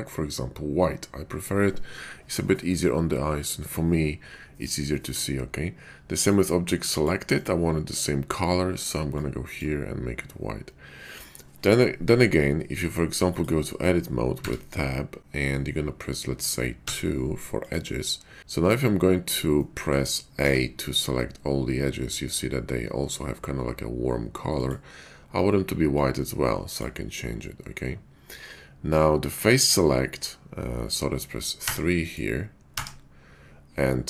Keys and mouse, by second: 14.4 Tab, 16.8 2, 18.4 a, 19.6 shift+middle click, 20.3 a, 32.6 3.